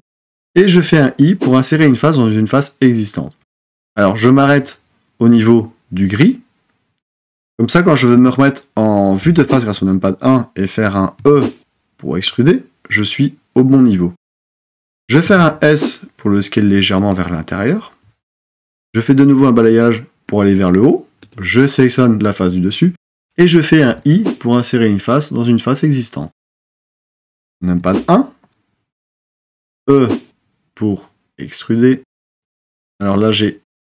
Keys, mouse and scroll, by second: 0.8 i, 9.2 KP_1, 11.3 e, 15.2 s, 23.8 i, 27.9 KP_1, 29.7 e.